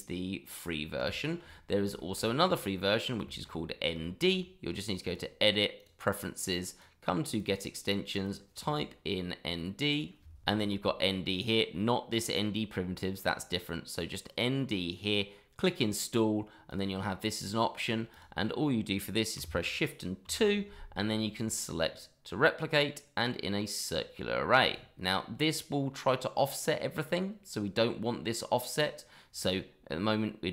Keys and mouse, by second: 1.1 shift+middle drag, 1.5 middle click, 1.9 shift+middle drag, 2.4 click, 2.7-3.1 middle drag, 3.2 shift+middle drag, 4.0 shift+middle drag, 5.0 click, 17.7 click, 18.1 click, 20.2 shift+2.